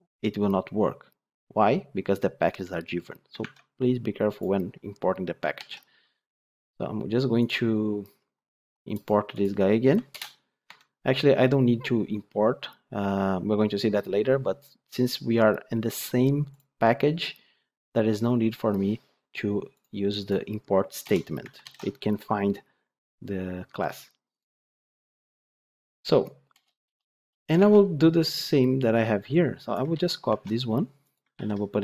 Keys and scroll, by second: 3.3 ctrl+Tab, 5.4 ctrl+x, 10.0 alt+Return, 21.6 ctrl+alt+l, 25.4 Tab, 27.4 Tab, 29.8 ctrl+c, 30.1 ctrl+Tab, 31.2 ctrl+v.